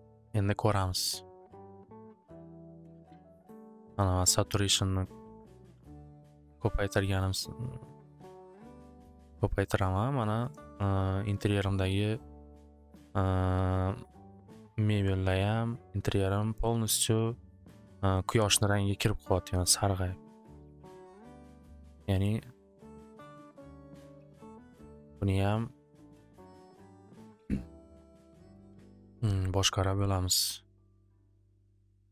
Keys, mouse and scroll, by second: 1.3 click, 3.4-4.8 drag, 7.0 click, 7.2 click, 9.0 click, 21.3 click, 22.2 click, 22.7 click, 23.3 click, 23.4-24.2 typing, 23.5 click, 27.0 click, 29.2-32.0 drag.